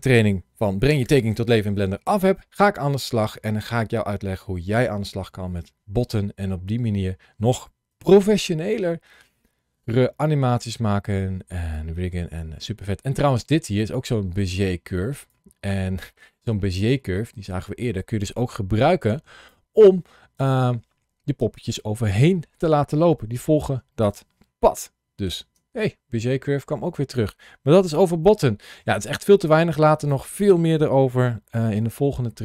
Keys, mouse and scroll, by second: 27.4-27.8 scroll down 1, 28.1 shift+middle click, 29.8 click, 31.4 g.